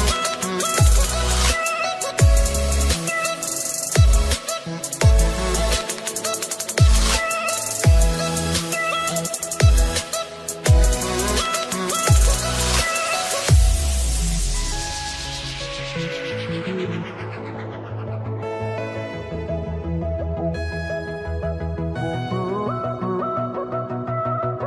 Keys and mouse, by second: 1.5 ctrl+click, 3.5 ctrl+click, 5.9 click, 7.2 click, 8.8 click, 9.7-12.6 typing, 10.3 click, 11.3 click, 11.8 click, 12.6 ctrl+shift+c, 12.6 click, 14.7 click, 14.7 ctrl+shift+c, 15.3 ctrl+shift+c, 15.3 click, 15.3 BackSpace, 23.6 click, 24.5 ctrl+c.